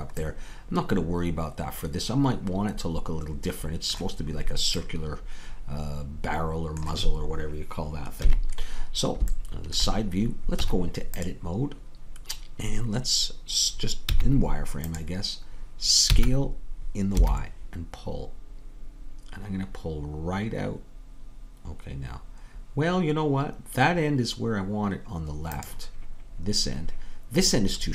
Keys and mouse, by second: 8.3 KP_3, 10.6 Tab, 16.2 s.